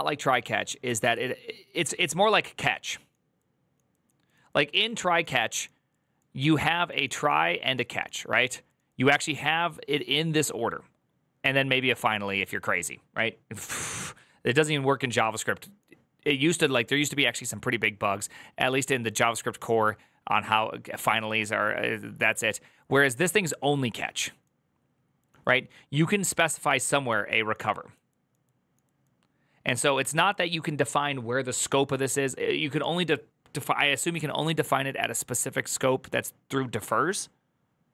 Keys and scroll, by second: 0.9 alt+=.